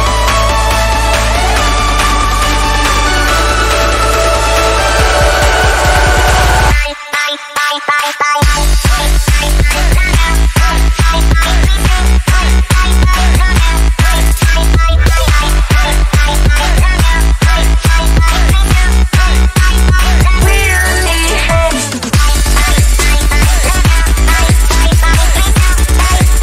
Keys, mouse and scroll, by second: 1.0 click, 2.3 ctrl+click, 3.3 click, 7.4 b, 8.0-8.4 ], 8.9-10.5 drag, 10.5 ], 10.6 ], 10.7 ], 10.8 ], 11.0-14.7 drag, 14.7-16.1 typing, 17.3 click, 18.0 z, 18.2 click, 19.2 b, 19.5 click, 20.9-21.9 typing, 21.3 click, 22.0-25.5 drag, 25.5 space, 25.6 click, 25.8 space, 26.1 click.